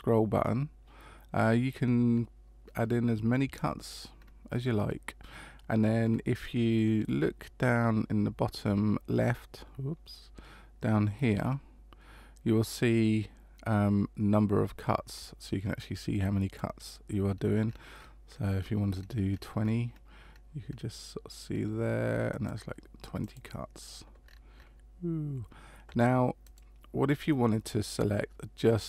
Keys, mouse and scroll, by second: 24.2-26.4 scroll up 6, 26.4 right click.